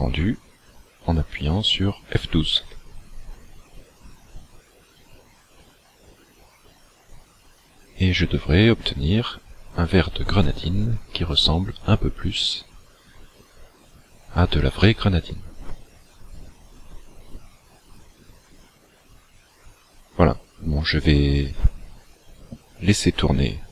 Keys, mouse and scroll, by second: 3.6 f.